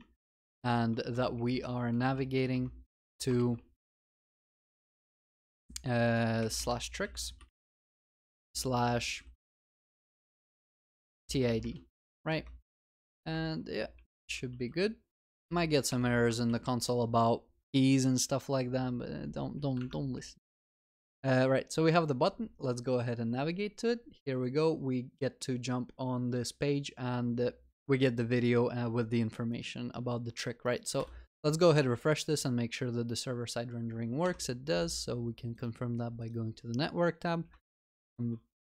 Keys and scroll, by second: 12.0 ctrl+s, 13.9 ctrl+y, 14.6 ctrl+s, 16.3 ctrl+y, 16.5 ctrl+s.